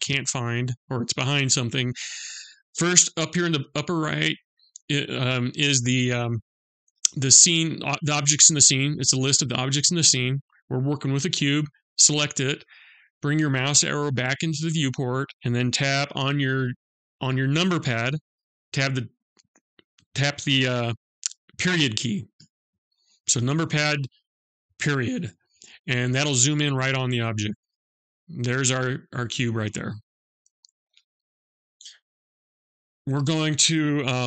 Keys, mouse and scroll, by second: 10.5 click, 21.9 KP_Decimal, 26.5-27.8 scroll down 7, 27.8-29.9 scroll up 2.